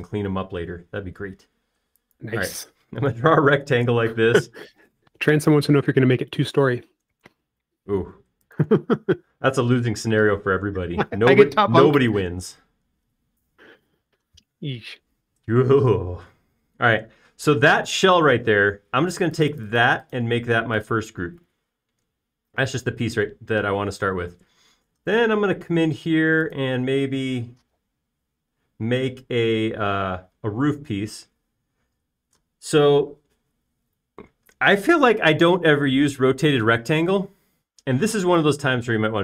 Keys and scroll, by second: 3.8 space, 5.1-5.9 typing, 10.1 shift+space, 10.8 p, 13.8 space, 25.6 r, 29.9 space.